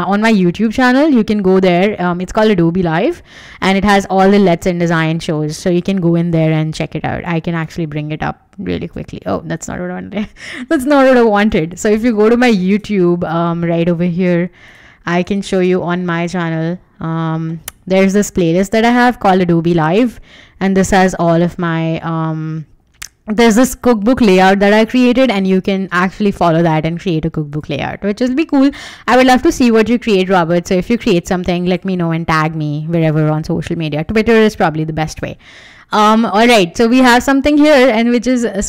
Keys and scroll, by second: 11.1-12.4 typing, 12.4 Right, 12.8 Return.